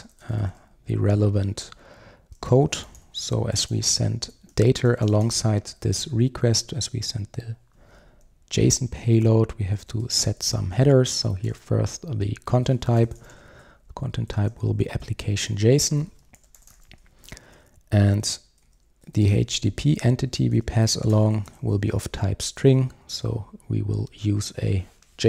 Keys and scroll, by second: 0.1 Return, 12.6 Return, 20.4 Return.